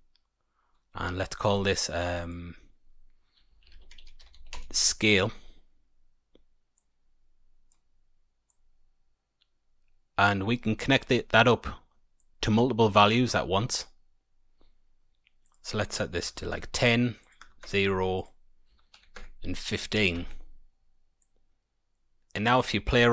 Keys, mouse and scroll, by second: 1.3 click, 1.5 click, 2.0 click, 2.1 click, 6.7 click, 8.4 click, 12.1 click, 15.4 click, 17.1 click, 18.1 click, 20.1 Tab.